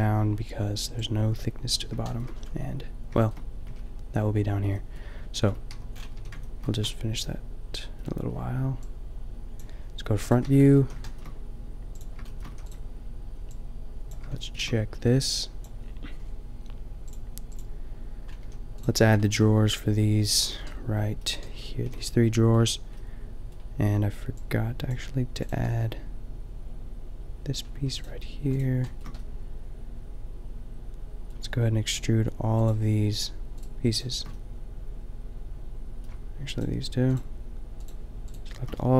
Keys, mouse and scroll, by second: 3.7 a, 5.5 Tab, 6.2 a, 10.4 Tab, 10.7 a, 12.5 a, 12.7-13.7 middle drag, 18.4 a, 19.3-21.6 shift+middle drag, 21.9 a, 25.8-27.4 middle drag, 28.8-30.9 shift+middle drag, 34.1 click.